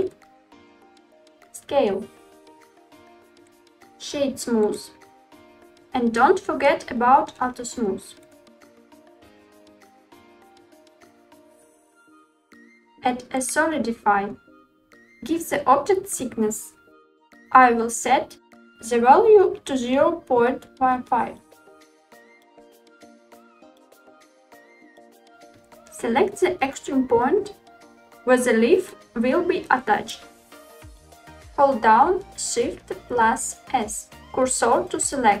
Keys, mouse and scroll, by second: 0.0 ctrl+a, 3.6-4.9 right drag, 8.2 click, 9.7 click, 11.5 click, 20.0-24.0 drag, 24.1 Tab, 24.5 middle click, 25.6-26.8 drag, 32.8 shift+s.